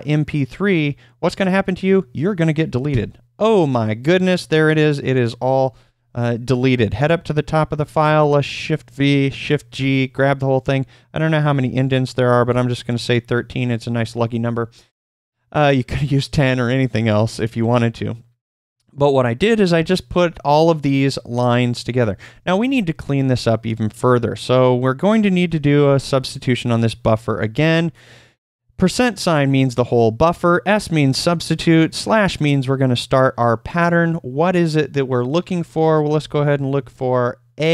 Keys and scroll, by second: 5.6 typing, 8.2-9.9 typing, 11.5-12.4 typing, 22.3 shift+;, 27.5 s, 35.9-37.1 typing.